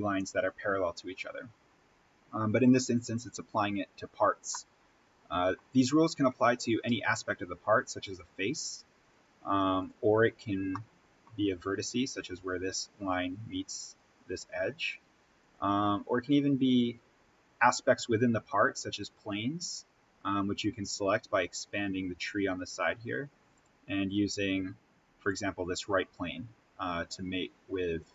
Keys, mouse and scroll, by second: 1.9-4.4 scroll down 1, 4.4-6.1 middle drag, 6.1-8.0 scroll down 1, 8.0 click, 9.0 right click, 9.7 click, 10.2-10.7 scroll down 1, 10.7-13.6 middle drag, 13.8 click, 15.4 right click, 16.1 click, 16.6-17.4 scroll up 1, 19.1 click, 23.4 click, 25.6-26.0 scroll up 1.